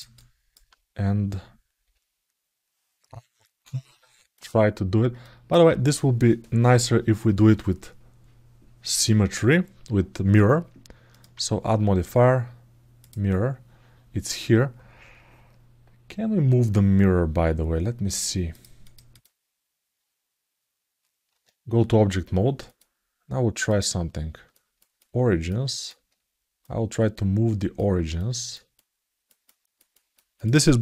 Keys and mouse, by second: 5.0 alt+shift+middle click, 10.9-12.9 drag, 17.9 click, 18.7 click, 22.5-24.0 drag, 24.3 ctrl+alt+middle click, 24.8 ctrl+alt+middle click, 25.5 ctrl+alt+middle click, 26.4-27.6 drag, 28.0 ctrl+alt+middle click, 28.5 ctrl+alt+middle click, 29.2 ctrl+alt+middle click, 29.7 ctrl+alt+middle click, 30.2 ctrl+alt+middle click, 30.6 KP_Decimal.